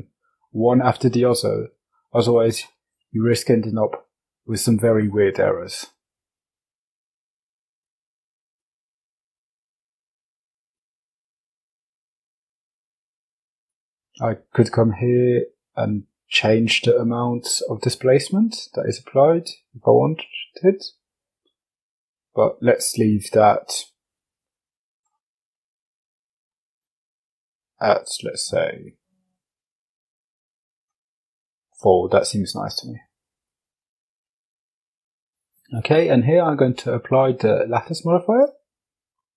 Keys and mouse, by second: 4.8 click, 6.7 click, 7.5 click, 8.2 click, 9.1 click, 10.5 click, 12.0-12.7 drag, 13.1-21.7 drag, 23.1-24.2 drag, 24.5-25.5 middle drag, 26.9-27.9 drag, 30.1-30.7 middle drag, 32.0 click, 37.6 click.